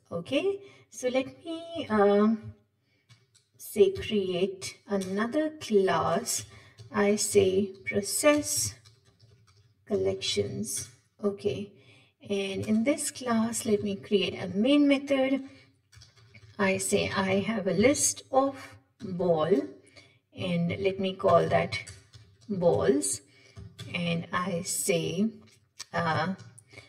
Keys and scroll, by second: 1.9 alt+Home, 3.1 Left, 4.2 alt+Insert, 12.6 shift+Return, 13.8 Tab, 19.4 Tab, 20.8 Tab.